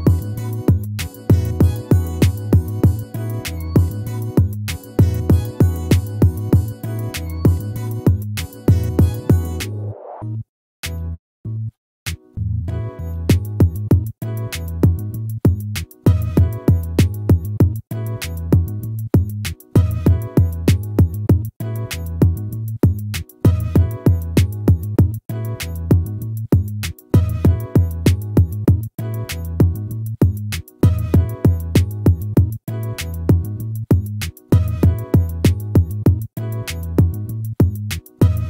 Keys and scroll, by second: 1.5 ctrl+-, 7.0 ctrl++.